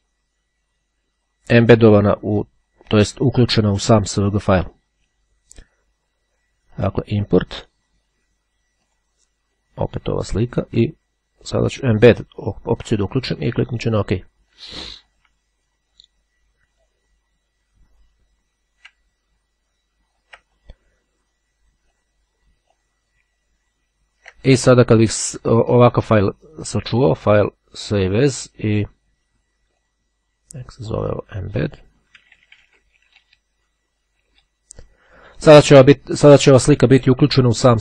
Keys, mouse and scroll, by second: 6.7 click, 8.9 click, 10.3 click, 11.9 click, 12.9-14.1 drag, 14.6-15.7 drag, 15.4 BackSpace, 16.3-20.7 drag, 16.3 BackSpace, 22.0-23.4 drag, 26.8 click, 27.9 click, 29.7 click, 30.9 click, 31.6-32.9 typing, 33.1 Return.